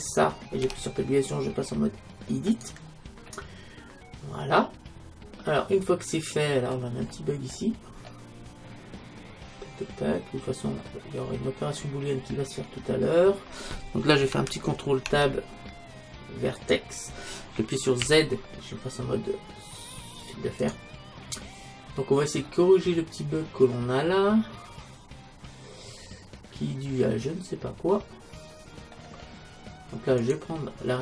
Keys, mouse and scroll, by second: 0.0-1.9 right drag, 0.6 Tab, 3.3-5.0 middle drag, 7.1-9.9 middle drag, 11.2-12.2 middle drag, 12.2-14.2 scroll down 1, 15.1 ctrl+Tab, 18.0 z, 21.3-22.5 middle drag, 22.7-24.4 middle drag, 24.5 middle click, 24.8 middle click, 30.2-31.0 right drag.